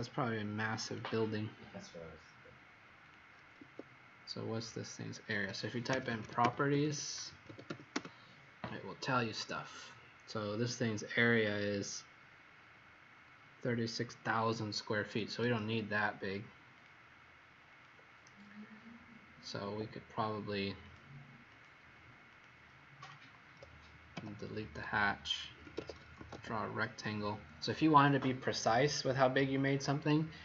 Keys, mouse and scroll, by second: 0.8 click, 3.5 Escape, 5.6-8.1 typing, 15.2 Escape, 15.4 Escape, 16.8 click, 19.6 Escape, 21.5 click, 24.1 Delete, 25.3-26.6 typing.